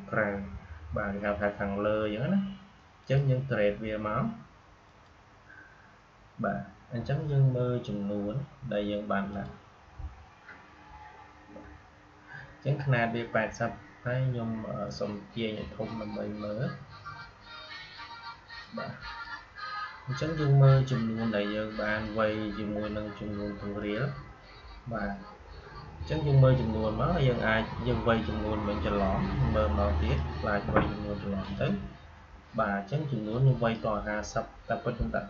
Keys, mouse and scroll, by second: 2.9 click, 9.2 click, 12.0 click, 14.7-17.1 drag, 17.1-21.5 shift+drag, 21.8 click, 27.7 Delete, 29.9 click.